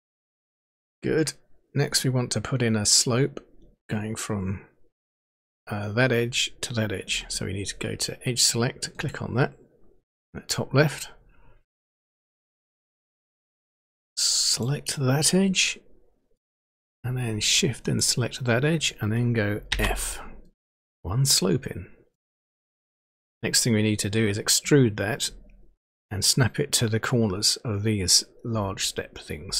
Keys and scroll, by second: 19.7 f.